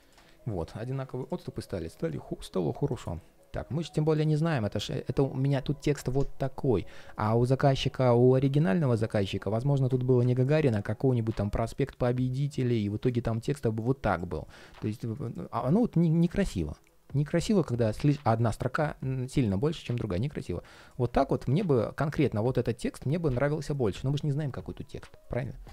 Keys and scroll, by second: 1.2 ctrl+shift+4, 14.6 super+z.